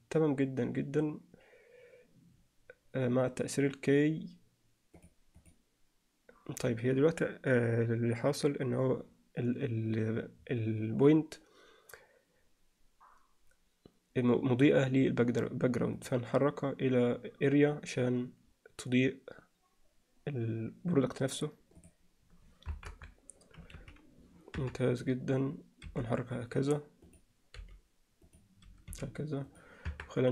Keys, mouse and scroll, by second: 5.0 click, 5.4 click, 16.0 click, 22.7 KP_0, 23.4 KP_7, 23.8 z, 24.6 KP_3, 25.9 r, 27.6 g, 28.9 r, 29.9 KP_0.